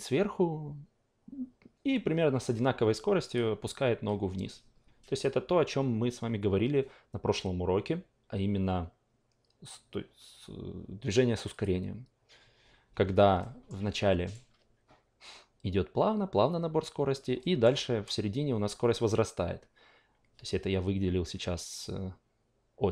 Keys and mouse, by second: 3.3 click, 11.5-13.4 drag, 13.4 alt+middle click, 13.9-17.2 alt+right drag, 17.4 alt+middle click.